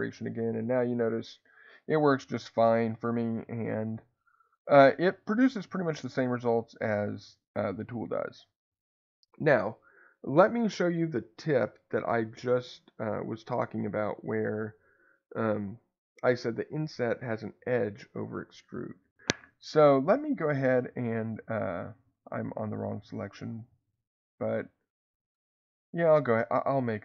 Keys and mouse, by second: 6.3 click, 10.6-12.3 middle drag, 20.1-23.0 drag, 25.3-27.0 drag.